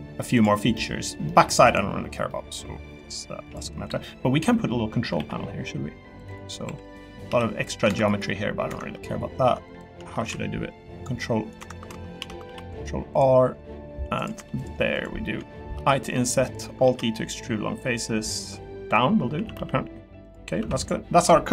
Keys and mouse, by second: 0.3 click, 0.5 middle click, 1.3 middle click, 2.3 middle click, 2.8 middle click, 3.7 middle click, 4.5 middle click, 5.1 ctrl+r, 6.6 3, 6.9 click, 7.3 s, 8.9 middle click, 9.7 shift+click, 10.2 ctrl+r, 12.2 ctrl+z, 12.4 ctrl+r, 14.3 3, 14.6 click, 15.7 i, 16.8 alt+e, 18.8 click, 19.3 a, 19.5 g, 20.2 click, 20.6 Tab, 20.8 click.